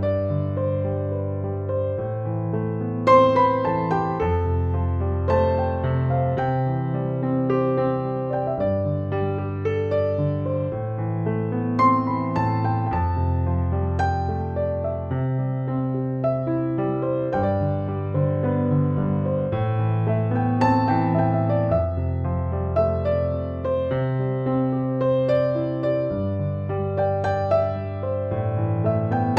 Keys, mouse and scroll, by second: 0.0 space, 0.2-0.8 drag, 0.5 space, 1.2-3.0 drag, 3.0 space, 4.9 shift+l, 6.0 click, 14.9 shift+F6, 18.8 click, 20.2 b, 20.8 alt+click, 23.7 ctrl+d, 24.5 space, 25.0 click, 25.3-25.7 space, 26.5 ctrl+j, 27.7 alt+t, 28.7 click.